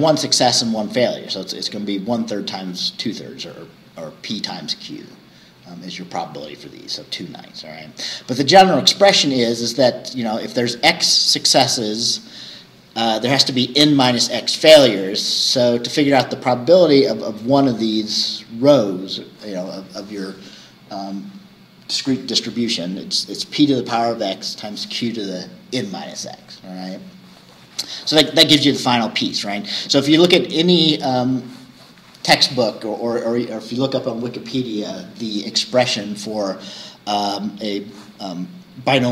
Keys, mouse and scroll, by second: 7.8-9.4 scroll down 2, 9.4-10.6 scroll down 1, 10.6-14.7 scroll down 1, 14.7-19.2 scroll down 1, 19.2-21.1 scroll down 1, 21.1-23.4 scroll down 1, 23.4-27.7 scroll down 1, 27.7-28.4 scroll down 1, 28.4-28.7 scroll down 1.